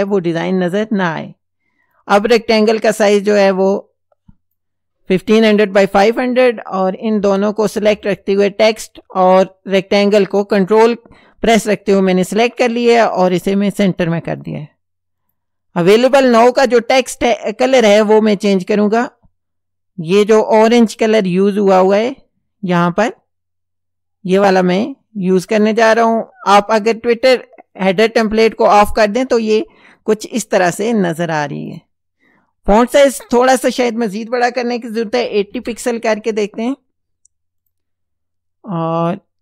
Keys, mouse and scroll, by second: 1.9 click, 3.6 click, 8.1 ctrl+click, 13.3 click, 14.4 click, 15.2 click, 21.0 click, 24.3 click, 25.6 click, 27.8 click, 31.7 click, 32.8 click, 35.0 KP_8, 35.2 KP_0, 35.5 KP_Enter, 37.6 click.